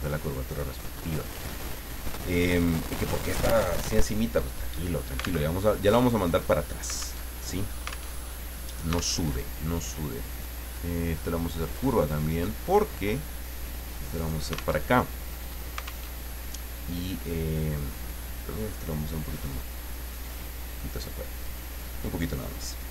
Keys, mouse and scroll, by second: 5.4 alt+Tab, 7.2 alt+Tab, 8.1 alt+Tab, 9.2 alt+Tab, 10.3 click, 11.7 click, 12.7-14.5 drag, 14.8 alt+Tab, 16.1 alt+Tab, 17.6-21.1 drag.